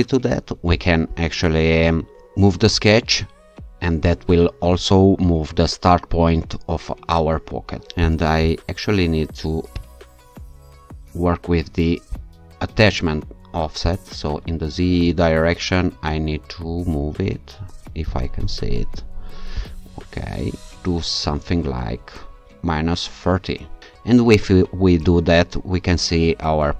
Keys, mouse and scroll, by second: 0.7 alt+click, 8.0 click, 9.8 click, 12.1 click, 13.9 click, 15.3 Up, 18.1 click, 19.6 click, 20.7 scroll up 2, 20.7-21.1 scroll down 2.